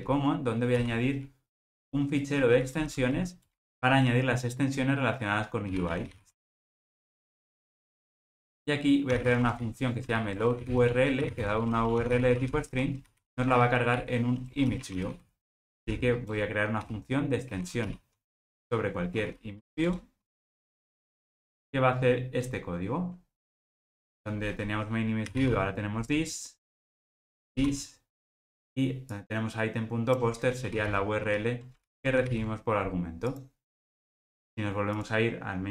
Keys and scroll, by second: 18.3 Escape, 21.5 alt+Return.